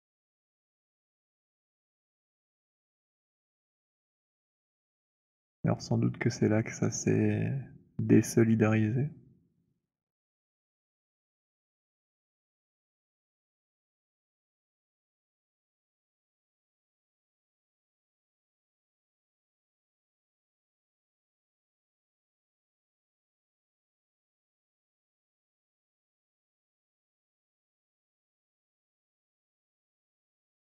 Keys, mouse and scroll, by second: 2.2 click, 5.1 alt+click, 5.1 alt+middle click, 5.3 alt+middle click, 5.6 alt+middle click, 8.3 right click, 9.7 click, 10.7 alt+middle click, 11.0 alt+right click, 11.8 alt+click, 15.2 right click, 16.4 click, 17.3 scroll, 19.5-20.4 scroll, 21.3 alt+scroll, 21.9-22.3 alt+scroll, 24.5-26.0 scroll, 26.0 alt+middle click, 26.0-29.1 c, 29.2 middle click, 29.2 c, 29.4 scroll.